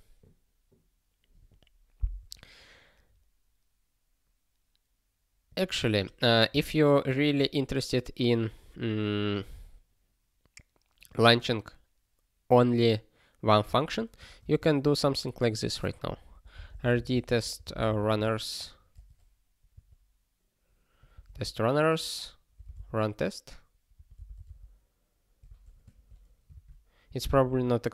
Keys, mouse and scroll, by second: 5.5 click, 6.5 Return, 7.2 (, 14.3 @, 14.4 space, 14.8 (, 16.6-17.4 typing, 18.9 Delete, 19.7 s, 21.1 ctrl+f, 21.3 space, 22.5 r, 25.4 ctrl+a, 25.9 (, 26.5 alt+shift+s, 27.3 super+b.